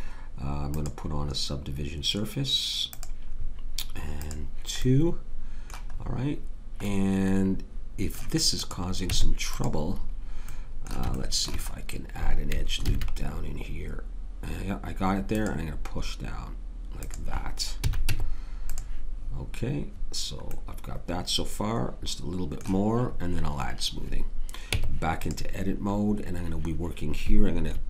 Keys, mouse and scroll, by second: 0.7-3.0 drag, 4.2-8.5 drag, 9.1 Tab, 12.8 ctrl+r, 17.8 a, 18.0 Tab, 24.7 Tab.